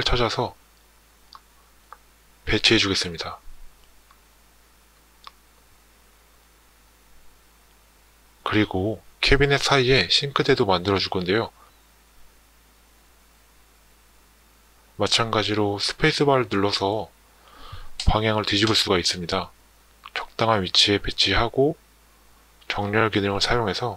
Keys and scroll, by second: 14.9 space, 16.0 space, 21.7 Tab.